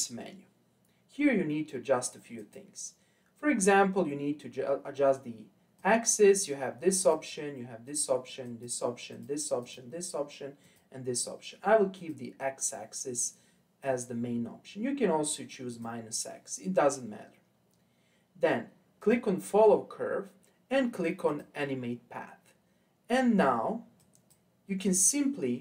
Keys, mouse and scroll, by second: 2.4 click, 3.7-4.4 scroll up 3, 5.7 click, 7.0 click, 7.8 click, 8.4 click, 9.1 click, 9.6 click, 10.6 click, 11.9 click, 15.7 click, 19.0 click, 21.2-24.3 drag, 24.8-25.6 drag.